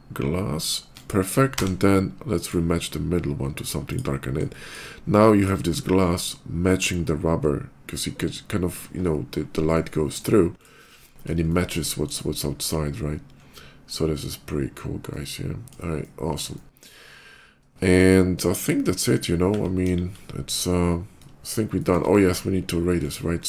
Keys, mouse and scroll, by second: 1.3 d, 2.2 click, 2.6 middle click, 3.7 click, 4.0 middle click, 4.3 shift+middle click, 4.7 middle click, 5.2 click, 9.9 middle click, 10.4 click, 10.7 middle click, 10.8 middle click, 11.1 middle click, 11.3 shift+middle click, 14.0 shift+middle click, 14.9 middle click, 15.8 shift+middle click, 16.4 shift+middle click, 17.0 shift+middle click, 17.6 shift+middle click, 19.7 KP_5, 20.2 middle click, 20.7 middle click, 21.6 shift+middle click, 22.8 shift+click, 23.2 shift+middle click.